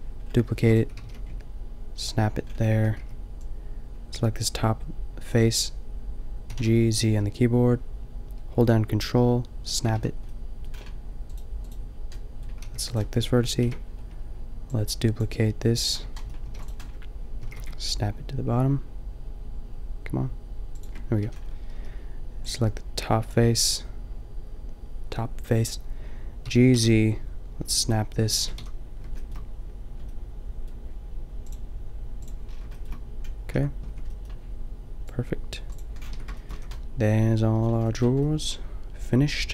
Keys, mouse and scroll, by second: 0.6 shift+d, 1.0 g, 2.8 a, 3.1 b, 6.6 g, 9.8 click, 10.0 a, 10.2 middle click, 11.3 middle click, 12.7 middle click, 12.7 g, 13.6 ctrl+l, 16.2 middle click, 16.5 shift+d, 17.5 g, 21.3 a, 21.7 b, 26.4 g, 28.4 click, 28.6 a, 32.7 middle click, 33.6 Tab, 33.9 Tab, 36.2 Tab, 36.6 a.